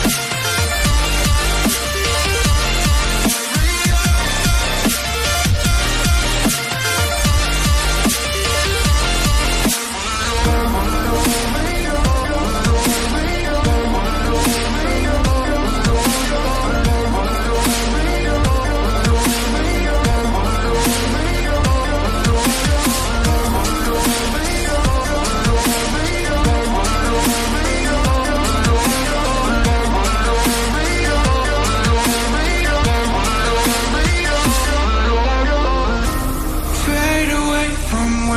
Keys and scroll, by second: 23.0 Right, 23.8 Down, 38.0 Down.